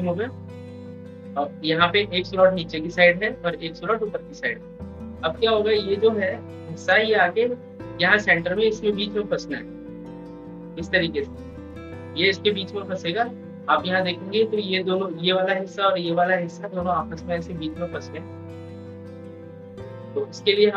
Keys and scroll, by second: 12.5 ctrl+z.